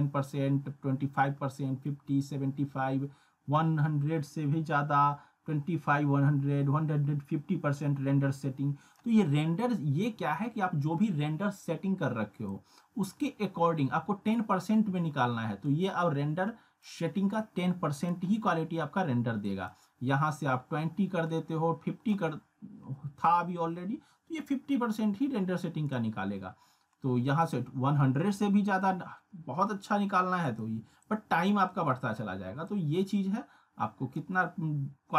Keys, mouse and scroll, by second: 12.5-14.3 drag, 18.3-19.4 scroll down 1, 19.4-22.2 drag, 24.7 scroll up 1, 25.9-27.5 drag, 30.4-32.3 drag.